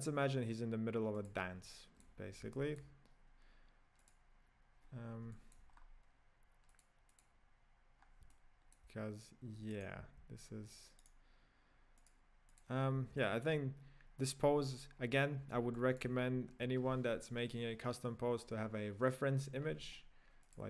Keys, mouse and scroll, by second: 1.7-2.2 shift+middle drag, 2.2-2.5 scroll up 2, 2.6-4.1 shift+middle drag, 4.1 click, 5.0 scroll down 3, 5.3-5.7 shift+middle drag, 5.7-6.8 scroll up 5, 6.8 click, 7.3-8.0 drag, 8.0-8.3 scroll down 3, 8.3-9.9 middle drag, 9.9 right click, 10.2 g, 12.1 click, 12.6 click, 12.9-13.2 scroll down 3, 13.2-14.4 middle drag, 14.4-15.8 scroll down 3, 15.8-16.2 shift+middle drag, 16.2 scroll up 4.